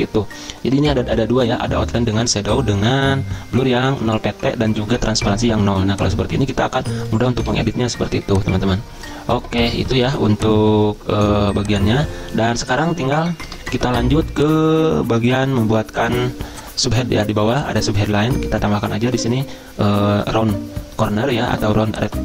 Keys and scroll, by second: 7.1-7.9 typing, 12.5 Delete, 13.5 BackSpace.